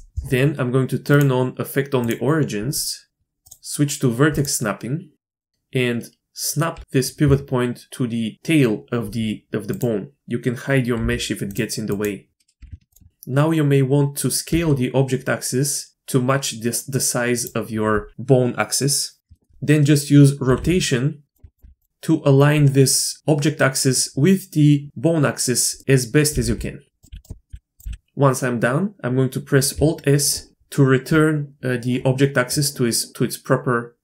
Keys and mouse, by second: 1.1 click, 2.0-5.1 drag, 5.3 shift+middle drag, 6.7 g, 11.0 h, 11.5-12.0 drag, 12.3 ctrl+z, 12.3 h, 12.6 g, 13.1 s, 14.5 s, 19.3 shift+middle click, 20.4-21.6 typing, 25.8 middle drag, 26.3-27.9 typing, 27.3 click.